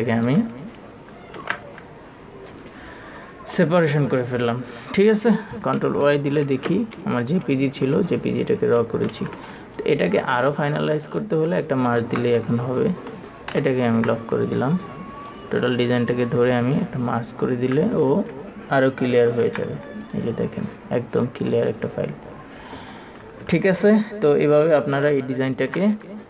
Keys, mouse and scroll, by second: 1.7 ctrl+s, 8.2-9.0 typing, 10.1 click, 12.3 ctrl+z, 13.8 KP_2, 15.2 click, 19.6 ctrl+y, 20.4 click, 24.8 ctrl+y, 25.3 space, 25.7 alt+super+m.